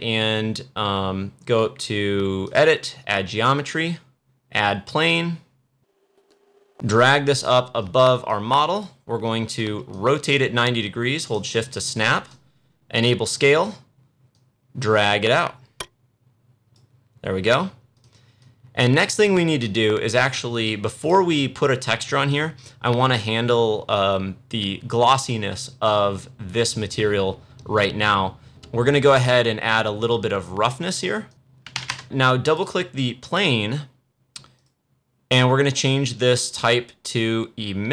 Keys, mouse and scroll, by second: 2.4 click, 6.1 click, 7.7-8.2 scroll up 1, 8.2-23.0 drag, 23.0-24.9 scroll down 1, 28.5 click, 31.2 click, 32.4 click.